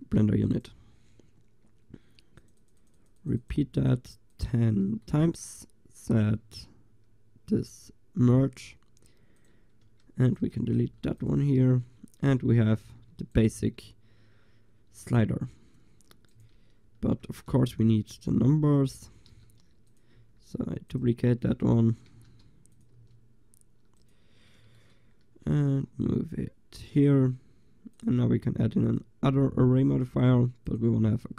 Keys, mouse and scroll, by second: 0.3 g, 2.4-3.5 drag, 4.6-6.2 drag, 9.9 Tab, 10.9 Delete, 11.3-12.9 drag, 11.7 Tab, 12.9 g, 17.6 shift+d, 19.4 s, 20.1 click, 20.2 g, 21.4 click, 21.7 drag, 22.1 s, 23.0 g, 24.4-24.9 drag, 25.6 g, 26.8-31.3 drag.